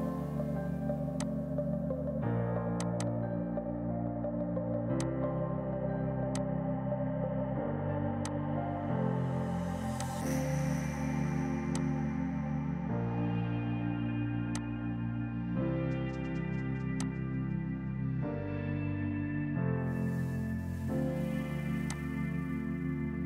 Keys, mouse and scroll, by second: 18.3 space, 18.5 Escape, 21.4 F3, 21.7 F2, 21.9 click, 22.1 right click.